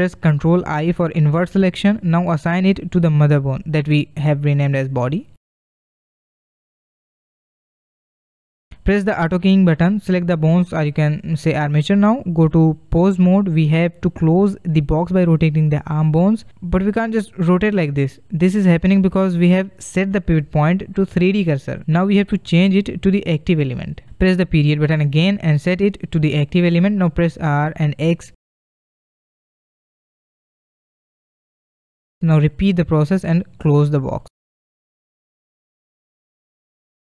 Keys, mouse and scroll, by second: 1.0 ctrl+i, 3.7 click, 4.5-5.3 middle drag, 6.0-8.0 drag, 8.0 scroll down 1, 8.2 middle click, 9.6 click, 11.7 click, 13.0-15.3 drag, 15.3-17.2 middle drag, 17.2 click, 17.6 shift+middle click, 17.7 r, 20.9 ., 27.8 r, 32.8 scroll down 1, 33.2-34.5 middle drag, 34.5 click, 35.9 r.